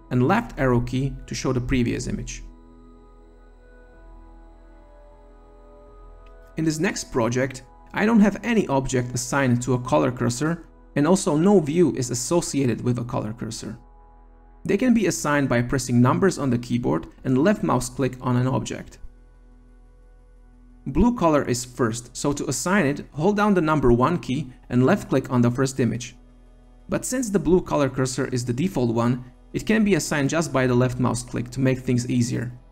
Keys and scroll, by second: 0.5 Left, 2.6 Left.